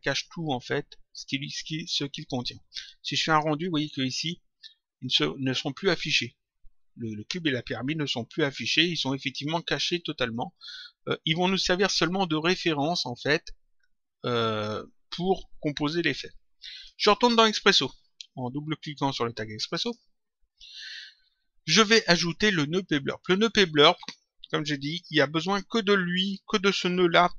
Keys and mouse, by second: 1.4 click, 3.2 click, 16.7 click, 19.6 click.